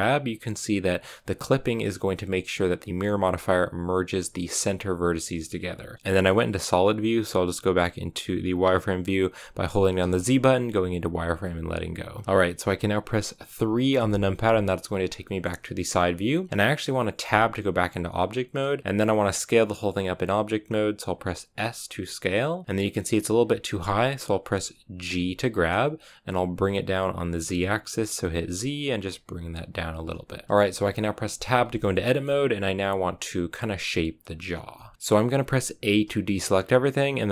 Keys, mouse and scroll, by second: 3.0 g, 5.9 z, 11.4 z, 13.9 KP_3, 15.1 shift+middle click, 15.8-17.1 scroll down 1, 17.1 Tab, 18.1 scroll down 1, 18.9 s, 25.0 g, 30.4 shift+middle click, 31.3 Tab, 31.8 shift+middle click, 32.4-34.8 scroll up 1, 34.8 shift+middle click, 34.9 a, 36.0 a.